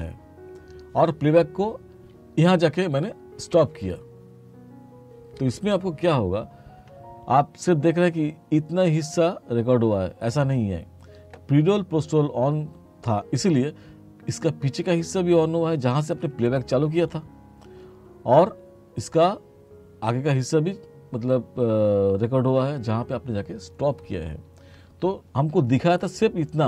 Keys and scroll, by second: 3.5 space.